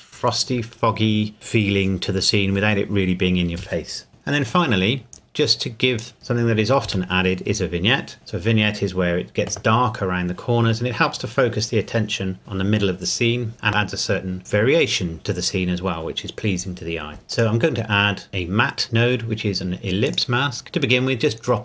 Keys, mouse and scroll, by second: 4.1-4.4 scroll down 1, 4.4 middle click, 5.6 click, 9.7 scroll down 1, 17.3 click, 20.1 click.